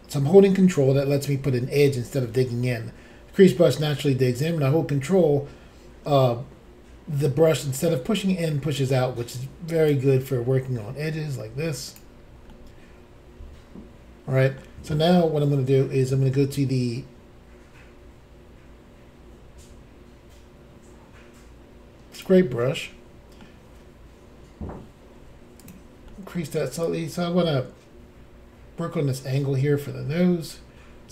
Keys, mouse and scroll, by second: 9.7 ctrl+click, 9.9 ctrl+click, 10.3 ctrl+click, 12.5 middle click, 22.1 click, 22.2 click, 22.6 middle click, 25.1 f, 25.6 click, 25.7 click, 26.1 middle click, 26.8 click.